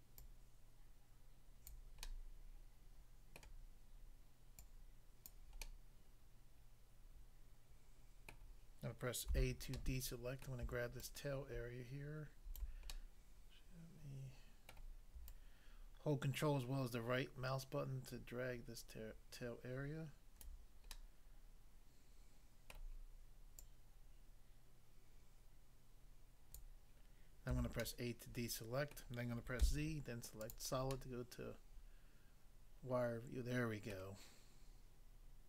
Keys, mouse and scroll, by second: 0.2 click, 1.7 click, 2.0 middle click, 3.4 middle click, 4.7 click, 5.3 click, 5.6 middle click, 8.3 middle click, 9.4 a, 9.8 middle click, 10.5 middle click, 11.0 ctrl+right click, 12.9 middle click, 14.7 middle click, 15.3 ctrl+right click, 20.9 middle click, 22.7 middle click, 23.6 click, 26.6 click, 27.5 a, 27.8 middle click, 29.0 middle click, 29.7 z, 30.4 click, 31.0 middle click, 34.0 middle click.